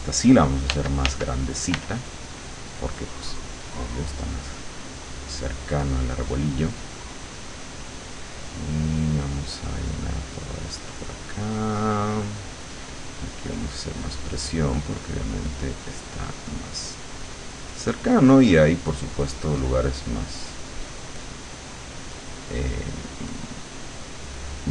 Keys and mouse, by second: 0.8 f, 4.6-14.6 drag, 14.9 click, 15.6 click, 16.2 click, 16.6 click, 17.3 click, 17.8 click, 18.2 click, 18.7 click, 19.3 click, 19.7 click, 20.0 click, 20.7 click, 21.2 click, 21.6 click, 22.0 click, 22.6 click, 23.4 click, 23.8 click, 24.4 click.